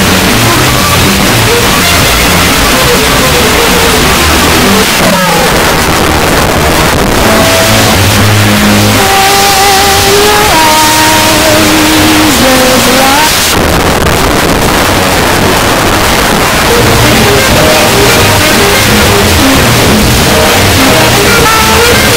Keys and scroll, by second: 4.8 Page_Down, 13.3 Page_Down.